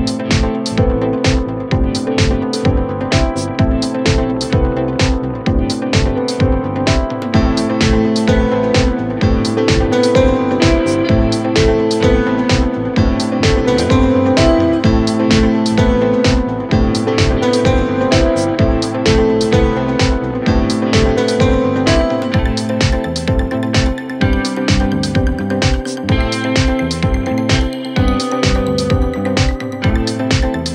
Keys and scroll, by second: 21.9 ctrl+z.